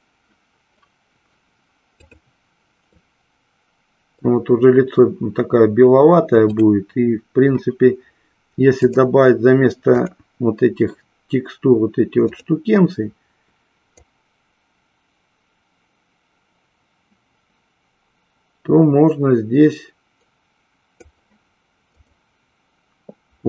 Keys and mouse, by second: 1.8 click, 3.3-4.6 middle drag, 8.7-10.5 drag, 22.1 click.